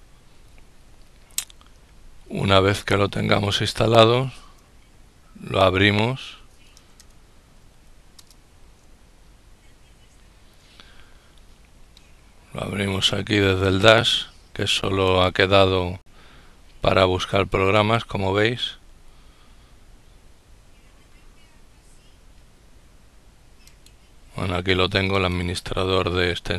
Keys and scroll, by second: 5.7-8.0 typing.